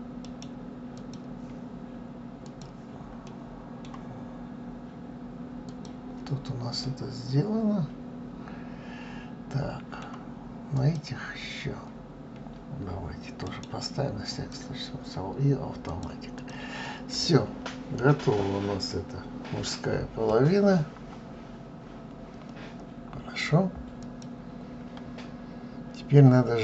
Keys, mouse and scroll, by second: 0.0 right click, 2.2 click, 3.0-5.4 middle drag, 5.4 click, 6.5-9.6 middle drag, 10.5 click, 13.3 right click, 15.7 click, 16.1 drag, 16.6-19.7 middle drag, 20.1-20.7 scroll down 3, 20.8-22.7 scroll down 2, 23.8 click.